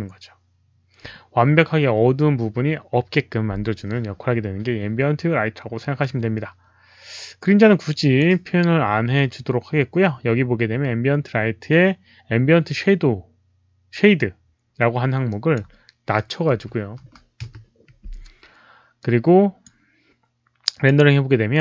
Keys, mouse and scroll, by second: 5.9-8.1 drag, 15.2 click, 16.4 KP_Decimal, 16.9 KP_1, 17.3 Return, 18.9 click, 19.6 KP_1, 19.6 KP_Decimal, 20.6 click, 20.8 Return, 20.8 KP_1, 20.8 KP_Decimal.